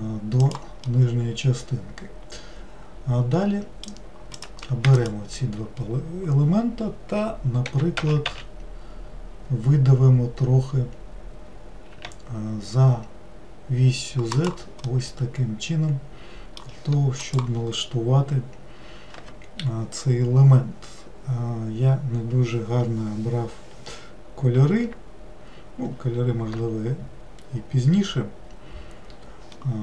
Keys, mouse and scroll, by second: 0.8-3.9 middle drag, 4.3 click, 4.9 shift+click, 7.7 e, 14.9-17.9 middle drag.